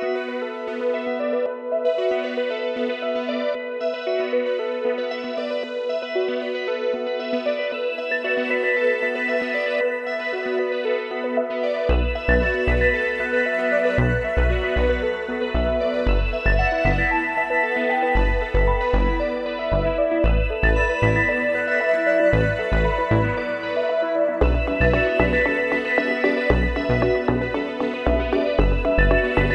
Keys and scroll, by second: 13.1 ctrl+z.